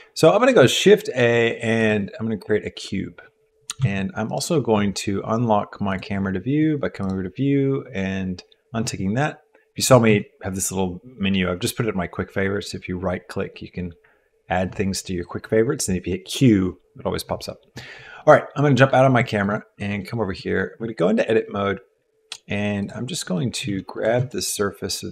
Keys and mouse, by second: 0.5 shift+a, 3.8 q, 5.9 click, 10.1 q, 12.6-14.7 drag, 18.2 middle click, 19.3 shift+middle click, 20.0 click, 20.4 Tab, 20.6 Tab, 20.7 Tab, 22.8 click, 23.3 click, 23.8 3, 23.9 click, 24.3 shift+middle click.